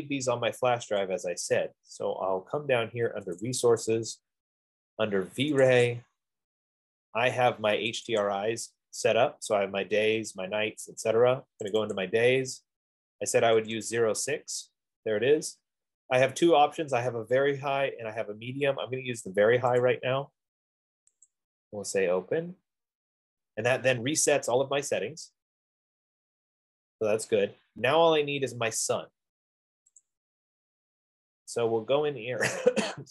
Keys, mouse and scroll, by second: 1.5 click, 2.5-3.3 scroll, 3.6 click, 4.1 click, 4.8 scroll, 6.0 click, 6.3 click, 8.3 click, 8.6 click, 12.2 click, 12.5 click, 14.1 click, 14.4 click, 20.2 click, 21.5 click, 30.5-33.1 drag.